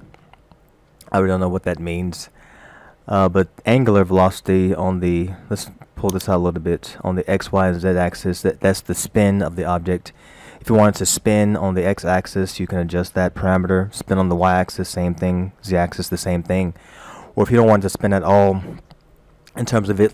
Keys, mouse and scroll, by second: 6.1 click.